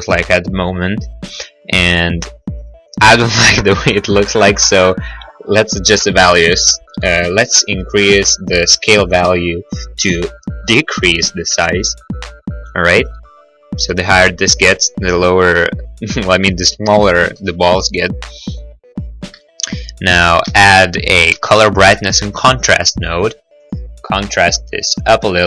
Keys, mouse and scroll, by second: 6.7 click, 11.2 7, 11.5 Return, 11.5 0, 17.4 middle click, 17.9 middle click, 20.7 shift+a, 21.3 c, 21.5 b, 22.6 click, 22.8 click, 23.6 click, 23.8 click.